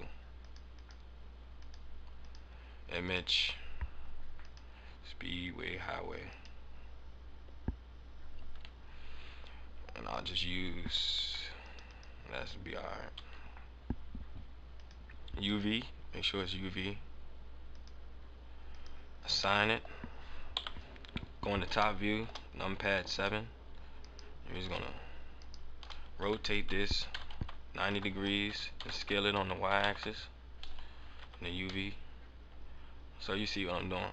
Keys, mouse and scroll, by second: 0.3 click, 0.7 click, 1.5 click, 3.0 click, 12.1 click, 13.4-14.7 scroll down 10, 14.7 click, 15.8-16.7 scroll down 7, 16.8-17.7 scroll up 1, 17.7 click, 18.6 click, 19.1 scroll up 2, 19.3-20.0 scroll down 5, 19.6 middle click, 20.4 KP_7, 21.7 shift+scroll up 1, 21.8 shift+middle click, 22.3 scroll up 1, 23.0 scroll up 2, 23.9 right click, 25.3 shift+right click, 26.1 a, 27.0 r, 28.3 s, 29.2 s, 31.2 Tab, 31.4 Tab, 31.6 scroll up 1, 31.8 middle click.